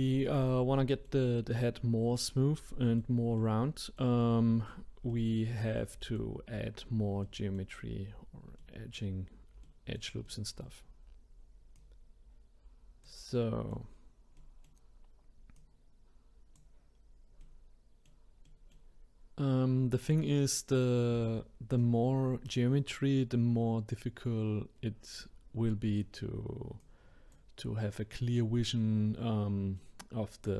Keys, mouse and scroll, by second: 0.7 middle click, 1.4-2.3 scroll down 1, 2.3-10.9 middle drag, 10.9-11.7 scroll up 1, 11.7 click, 13.3 middle click, 14.0-14.3 scroll down 1, 14.3-15.5 middle drag, 15.5 click, 17.0 scroll down 2, 17.4-20.0 middle drag, 20.0 click, 23.3-26.5 scroll up 2, 26.8-29.8 drag, 29.8-30.5 middle drag.